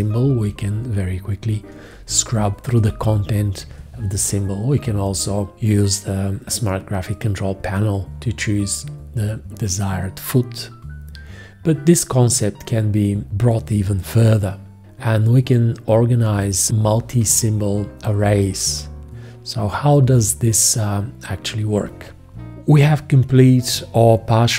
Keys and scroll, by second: 1.4 shift+,.